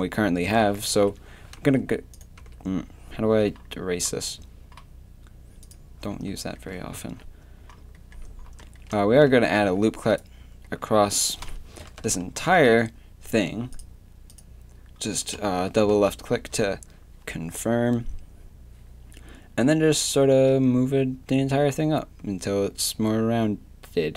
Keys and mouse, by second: 1.6 Escape, 2.4 Escape, 6.6-7.6 drag, 7.0 shift+c, 9.4 ctrl+r, 11.4 KP_7, 12.3 ctrl+r, 15.3 KP_1, 15.9 z, 16.5 z, 20.3 g.